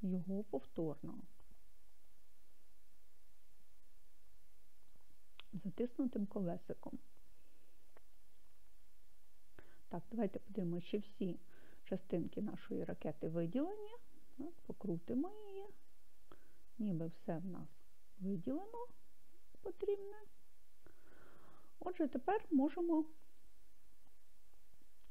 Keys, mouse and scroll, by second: 0.0 middle click, 0.8-1.9 scroll down 1, 1.9 click, 2.6 middle click, 8.0 right click, 9.0-10.6 scroll down 6, 10.6-11.0 scroll up 1, 11.5-12.9 scroll down 1, 13.9-23.4 middle drag, 23.9-24.9 scroll up 1, 24.9-25.1 scroll down 2.